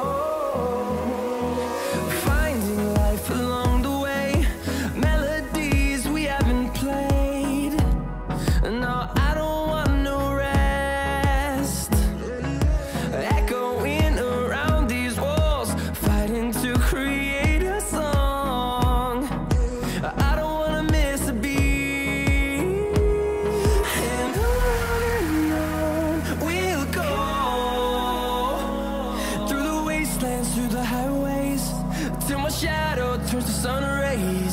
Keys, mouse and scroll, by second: 5.0-5.3 scroll up 1, 5.9-25.8 drag, 6.2 typing, 19.0 typing, 25.8 right click, 26.5 click, 29.1 click, 29.1 typing.